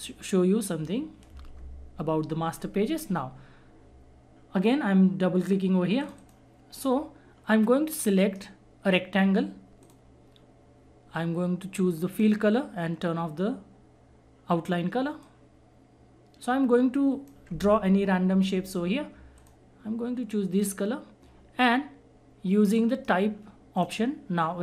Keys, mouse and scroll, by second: 6.0 click, 7.9-9.8 right drag, 9.8 click, 12.1 click, 15.2-19.3 drag, 22.7 right click, 23.8 click.